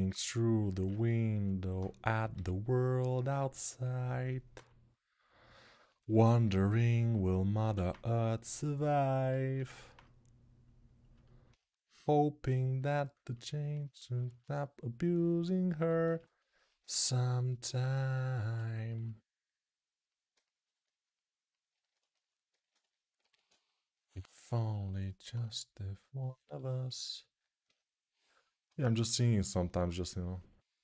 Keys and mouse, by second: 2.1 g, 7.5 alt+q, 14.1-17.4 alt+right drag, 15.8 ctrl+z, 17.4-21.5 alt+shift+drag, 21.5-23.5 ctrl+alt+shift+right drag, 23.0 alt+q, 23.5-30.8 alt+drag.